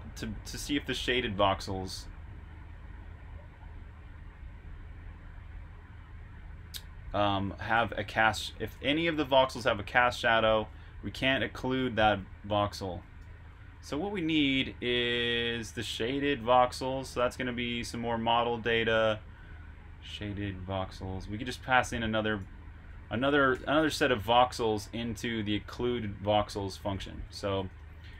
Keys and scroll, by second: 1.5 typing, 5.9-8.6 typing, 13.1 Escape, 13.4 typing, 16.9-17.2 typing, 18.9-19.6 typing, 22.3-24.4 typing, 25.7 typing.